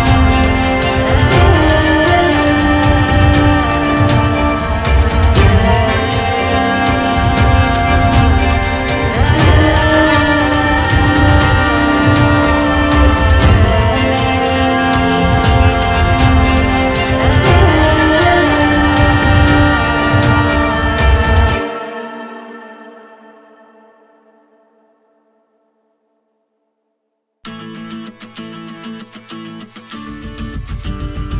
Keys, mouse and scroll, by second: 1.6-4.9 drag, 3.2 scroll down 6, 3.4-4.1 middle drag, 4.9-6.4 middle drag, 5.6-6.4 drag, 7.5-8.3 drag, 8.4-8.8 scroll down 2, 8.8-10.3 drag, 10.3-10.8 middle drag, 10.8-11.7 scroll up 4, 13.2-16.4 drag, 17.2 middle click, 17.6 click, 18.4 middle click, 18.7 click, 20.1-21.6 drag, 21.9 click, 22.0-22.6 scroll down 2, 22.6 click, 23.4-25.0 drag, 25.3-27.5 drag, 27.5-28.2 middle drag, 28.2-29.0 scroll up 2, 31.2 middle click.